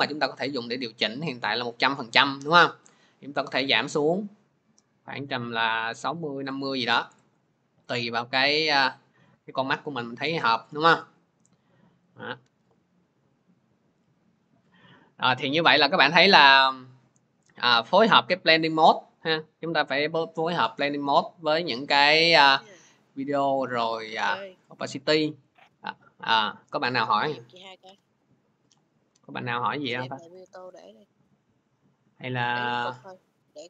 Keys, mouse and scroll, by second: 6.3 click, 7.1 click, 9.3 click, 10.4 click, 29.4 alt+Tab, 30.2 alt+Tab, 30.4 alt+Tab.